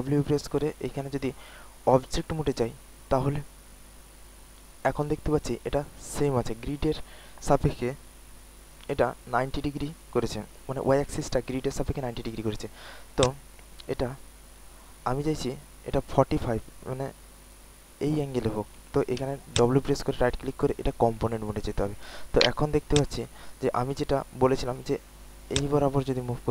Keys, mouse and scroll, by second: 0.9-2.1 drag, 0.9 typing, 2.1 click, 2.1 typing, 3.2 click, 3.2 typing, 12.8-14.3 typing, 13.1 click, 13.4 click, 14.3-15.3 drag, 15.3 typing, 19.2-21.1 typing, 19.5 click, 20.3 click, 20.7 click, 21.1 click, 21.9 alt+click, 22.3 alt+right click, 22.8 alt+click, 23.5 alt+middle click, 25.5-26.5 drag.